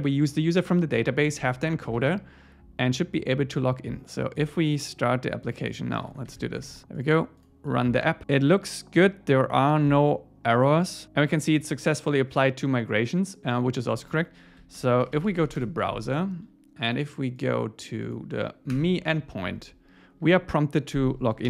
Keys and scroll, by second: 2.0 super+s, 6.1 super+1, 15.6 Return, 18.8 Return.